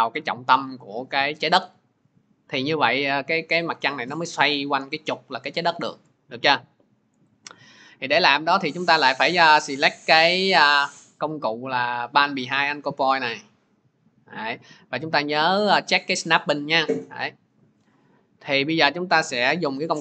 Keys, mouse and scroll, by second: 7.1-12.1 drag, 12.7-17.8 drag.